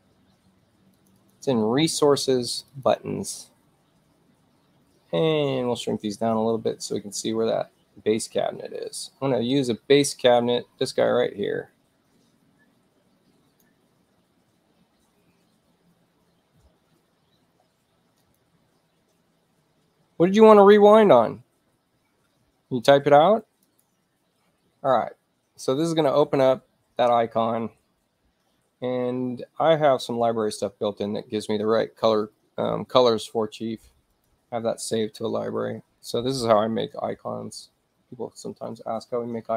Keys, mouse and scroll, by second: 1.0 click, 1.2 click, 2.5 click, 2.7 click, 7.1 ctrl+scroll up 2, 7.4-7.9 ctrl+scroll down 2, 8.4-9.1 scroll down 2, 9.1-11.0 scroll down 1, 11.0-13.7 drag, 18.3 click, 20.6 click, 23.7 click, 30.4-32.1 alt+middle drag, 34.2 click, 38.3 alt+middle click.